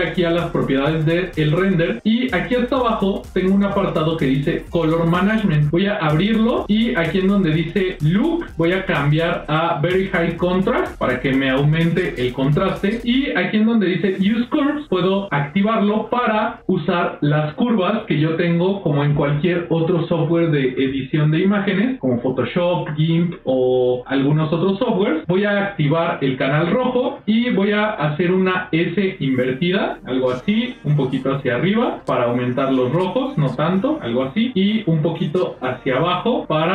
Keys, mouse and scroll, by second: 0.8 click, 5.6 click, 6.3 middle click, 8.7-10.4 drag, 14.7 click, 16.0 click, 16.4 scroll down 1, 16.5 middle click, 16.5 scroll up 1, 16.6-18.6 scroll down 1, 26.5 click, 28.4-31.9 drag, 32.0-33.5 drag, 33.9 click, 34.6-36.7 drag.